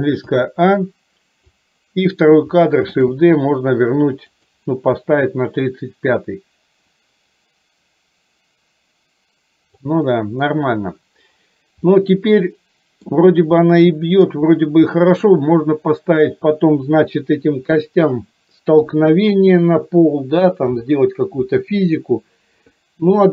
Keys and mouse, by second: 0.4 a, 1.5 click, 3.1 shift+d, 5.8-9.8 drag, 11.9-13.1 middle drag, 13.7 middle click, 15.0 middle click, 16.7 KP_4, 18.9 KP_3.